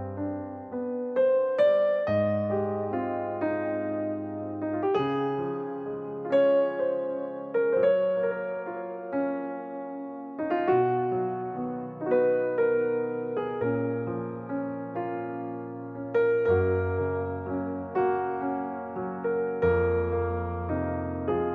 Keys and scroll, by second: 1.6 l, 4.6 space, 7.0 l, 12.8 Left, 13.1 Right, 15.3 space, 16.4 ▮, 18.4 space, 21.0 g.